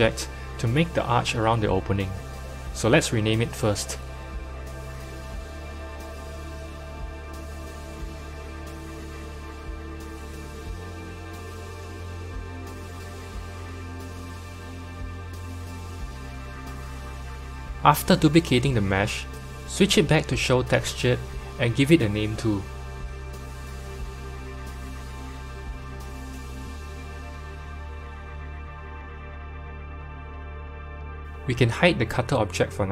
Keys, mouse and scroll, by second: 2.4 click, 4.4 F2, 6.1 t, 8.4 s, 13.4 click, 15.6-16.9 drag, 18.4 shift+d, 20.6 click, 21.4-23.3 drag, 25.5-29.5 drag, 25.5 s, 31.2 click, 32.5 click.